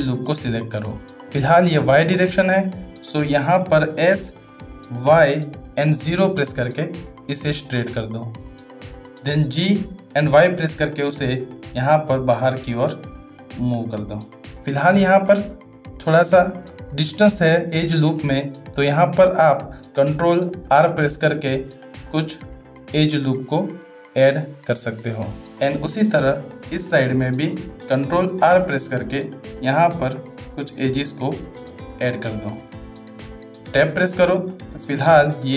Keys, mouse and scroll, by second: 2.8 shift+middle click, 9.7 g, 16.6 shift+middle click, 20.2 ctrl+r, 26.7 shift+middle click, 28.2 ctrl+r, 33.9 Tab, 34.5-35.5 middle drag.